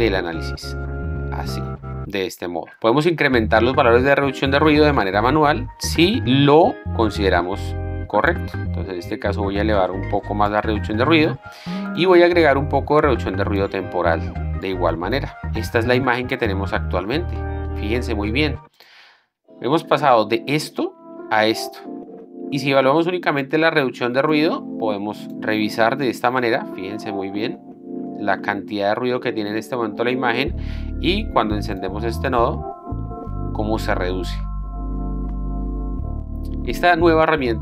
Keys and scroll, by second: 15.4 Return, 17.3 z, 20.2 d.